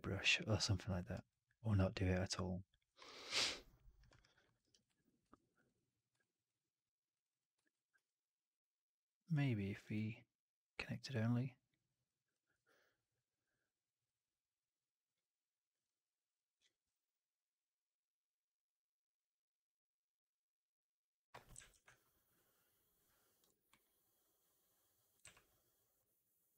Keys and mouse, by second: 1.0 alt+right drag, 1.4-2.6 alt+drag, 2.8 alt+middle drag, 2.9 alt+right drag, 3.1 alt+click, 4.1 alt+click, 4.3 alt+middle drag, 4.5 alt+right drag, 4.8 3, 5.6 click, 6.1 alt+click, 7.2 click, 7.9 r, 10.1 click, 15.4-21.3 drag, 21.5 ctrl+z, 22.0-23.3 alt+drag, 24.2 middle click, 25.1 w.